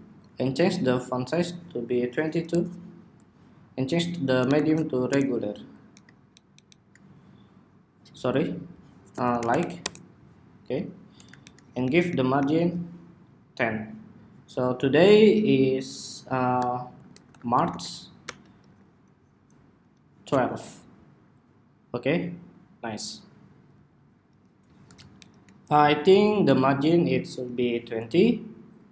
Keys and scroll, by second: 11.1 alt+shift+Down, 11.6 alt+Up, 11.8 alt+Up, 12.1 alt+Up, 19.6 Escape, 24.9 alt+shift+Down.